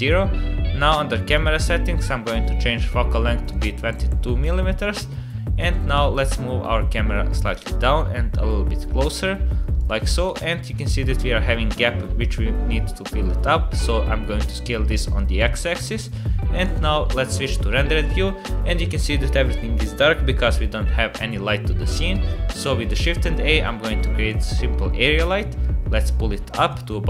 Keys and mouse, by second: 3.4-4.5 drag, 3.9 KP_2, 5.7-7.4 drag, 7.8-9.1 drag, 10.2 s, 13.9 s, 22.1 shift+a, 25.3 g.